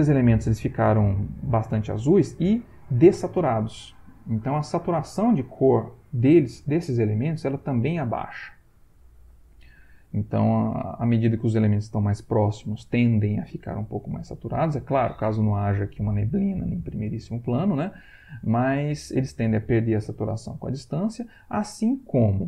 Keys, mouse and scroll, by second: 20.4 Right.